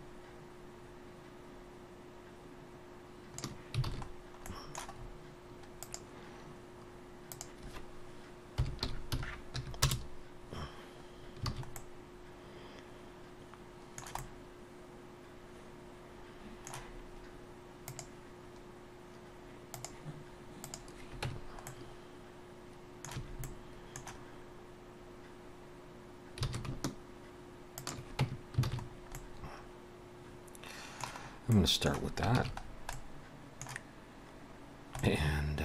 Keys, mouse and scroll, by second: 3.9 alt+a, 4.2-5.0 scroll down 2, 4.5 middle click, 5.0 scroll up 2, 5.8 click, 5.8 scroll up 1, 7.5 click, 11.2-11.5 scroll down 2, 11.5 alt+a, 11.8 middle click, 14.2 middle click, 20.7 click, 21.3 Tab, 21.7 middle click, 23.2 a, 23.5 middle click, 26.5 alt+s, 28.2 Tab, 28.7 alt+a, 28.8-29.2 scroll down 2, 29.2 middle click, 31.3 scroll up 1, 31.5 middle click, 32.4 ctrl+s, 32.7-33.0 scroll down 2, 32.9 middle click, 35.0 middle click.